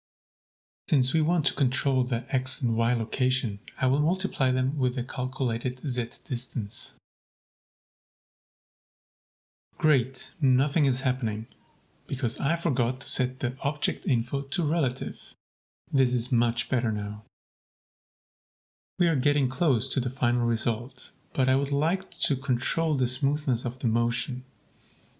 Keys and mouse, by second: 4.1-5.0 drag, 5.6-6.5 drag, 6.9 click, 8.1 click, 8.7 middle click, 9.4 g, 9.5 z, 11.5 Escape, 13.3 click, 14.8 shift+click, 15.4 g, 15.6 z, 17.3 click, 17.7-18.4 drag, 19.1 click, 19.3 g, 19.8 z, 20.6 Escape, 20.8-21.3 drag, 21.6 shift+drag, 22.4 click, 22.9 shift+a.